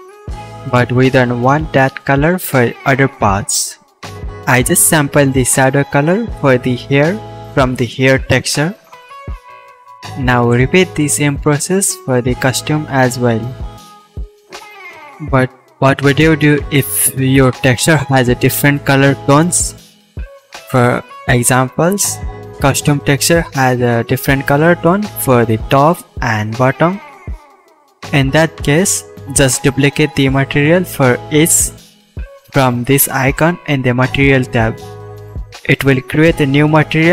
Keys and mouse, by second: 5.7 right click, 5.7 middle click, 5.9-15.5 drag, 19.3 Left, 19.9 Left, 21.9-24.1 shift+middle drag, 22.4-24.1 drag, 22.4-24.1 right drag, 23.7 BackSpace, 28.2-29.4 middle drag, 29.5-31.4 middle drag, 31.5 middle click, 35.5 click, 35.5 middle click, 35.5 right click, 36.2 click, 36.2 middle click, 36.2 right click, 36.7-37.1 shift+drag.